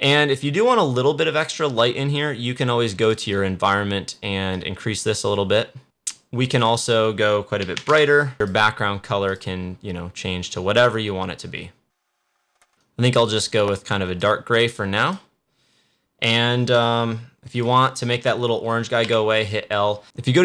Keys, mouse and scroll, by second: 2.9-5.8 drag, 6.5-15.0 drag, 17.4 click, 19.0 l.